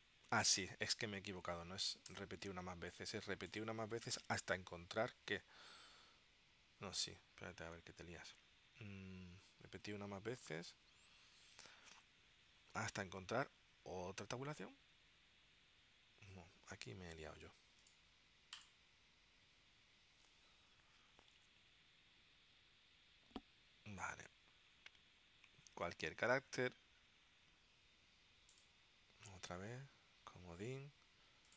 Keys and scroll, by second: 2.2 BackSpace.